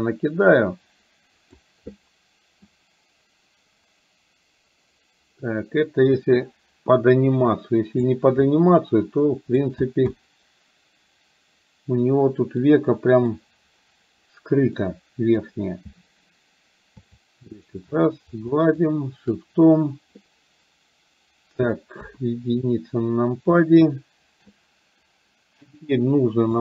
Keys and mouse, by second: 2.7-8.1 drag, 8.5-9.7 drag, 10.1-12.6 middle drag, 12.9 middle click, 14.7 middle click, 17.2 shift+click, 18.0 shift+click, 18.5 shift+click, 22.0 KP_1, 23.7 shift+middle click.